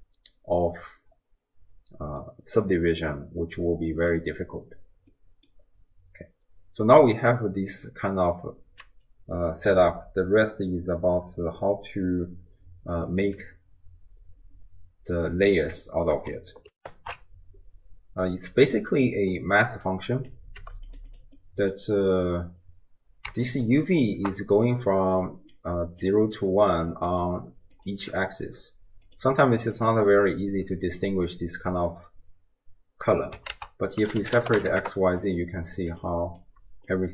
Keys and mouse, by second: 0.4 d, 2.4-4.2 middle drag, 5.2 middle click, 16.8 ctrl+alt+shift+w, 16.9 ctrl+alt+shift+q, 19.9-20.4 drag, 20.6 g, 21.1 click, 21.4 middle click, 23.7 ctrl+shift+click, 25.3-26.4 d, 25.6 click, 26.9-28.1 d, 27.1 click, 27.8 click, 29.1 click, 29.8 click, 33.5 ctrl+a, 36.4 click.